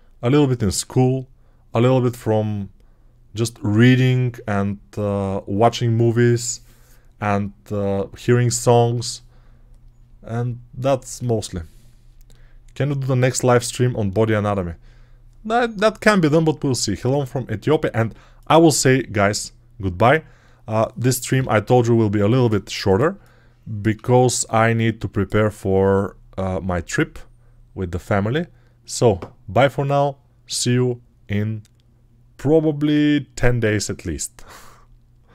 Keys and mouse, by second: 22.7-23.8 ctrl+alt+drag.